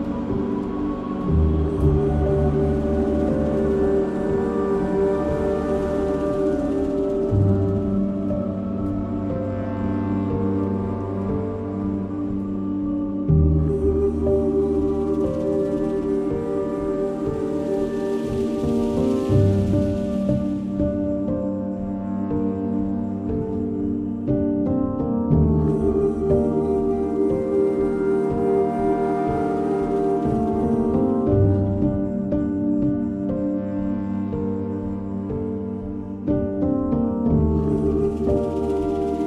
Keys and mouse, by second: 2.4 click, 3.5 Return, 4.7 click, 6.0 click, 7.8 k, 9.6 click, 11.0 click, 12.0 click, 13.6 click, 14.7 click, 15.9 click, 16.9 click, 18.0 click, 18.8 Return, 20.4 3, 22.7 x, 24.9 1, 25.2 click, 26.9 j, 27.6 click, 29.6 shift+click, 30.7 j, 31.0 click, 32.4 j, 33.5 shift+click, 34.4 j, 36.1 j, 36.9 shift+click, 37.7 j.